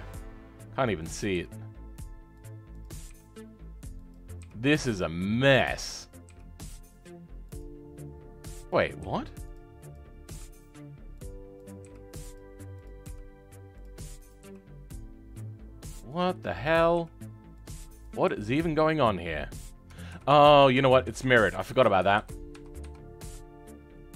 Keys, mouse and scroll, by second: 6.0 click, 20.2-20.8 ctrl+z.